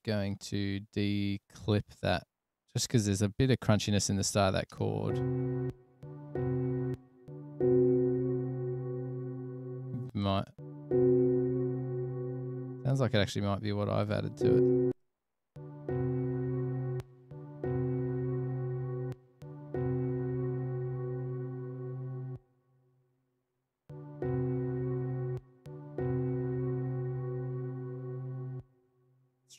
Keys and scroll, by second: 5.0 space, 5.9 space, 6.2 space, 7.2 space, 13.4 space, 15.8 space, 17.4 space, 19.3 space, 19.5 space.